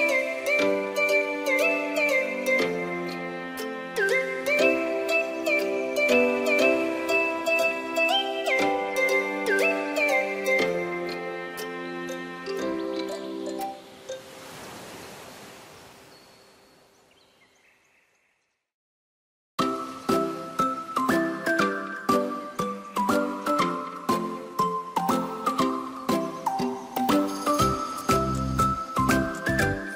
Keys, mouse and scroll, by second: 0.8 click, 1.8 click, 2.9-3.7 scroll down 2, 5.9 shift+click, 7.1 click, 8.2-9.6 drag, 10.5 ctrl+p, 11.9 click, 12.1-12.8 scroll down 3, 12.8 click, 13.5 Tab, 14.1 Tab, 15.9 click, 16.6 scroll up 3, 16.8-17.2 scroll down 2, 17.2-20.0 middle drag, 21.4-24.5 shift+middle drag, 25.6-28.2 drag.